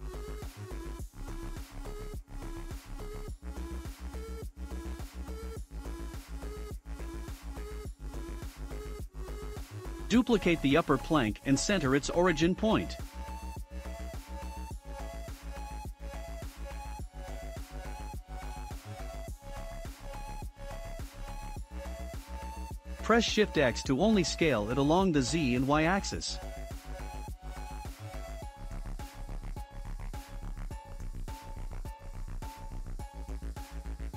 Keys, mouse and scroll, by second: 0.2-1.0 scroll down 1, 1.0 click, 1.0 scroll down 3, 1.7-3.2 middle drag, 3.2-3.8 scroll up 5, 3.8-5.9 middle drag, 5.9 click, 6.5-8.1 middle drag, 8.1 shift+d, 11.3-15.2 right drag, 15.2 s, 18.7 click, 19.6-19.9 scroll up 2, 19.9-22.0 middle drag, 22.0 s, 30.1-30.6 drag, 30.6 scroll, 30.6 scroll up 1, 30.7-31.2 scroll down 3, 31.2-34.1 shift+middle drag.